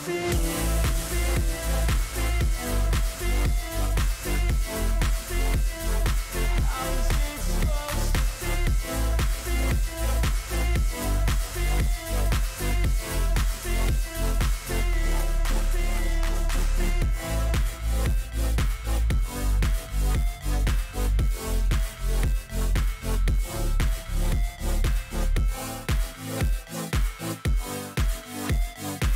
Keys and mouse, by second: 2.2 click, 4.4 click, 5.5-6.6 drag, 7.1-8.3 drag, 10.4 click, 12.9 click, 14.0 click, 15.3-16.3 drag, 18.3 click, 20.4 click, 21.1-22.2 drag, 22.6-23.7 drag, 25.5 click, 28.0 click.